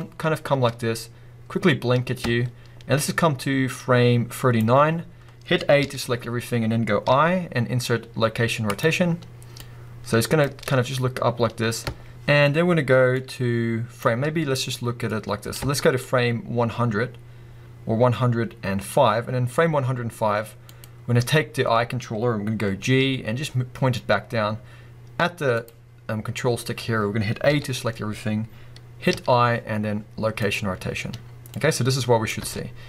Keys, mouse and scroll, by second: 0.1-0.5 scroll down 2, 0.5 space, 2.3 space, 5.8 a, 7.0 i, 10.5 space, 11.8 space, 14.1 space, 15.6 space, 19.5-20.6 scroll up 1, 22.8 g, 25.7 click, 27.5 a, 29.1 i, 31.6-32.8 drag, 32.4 space.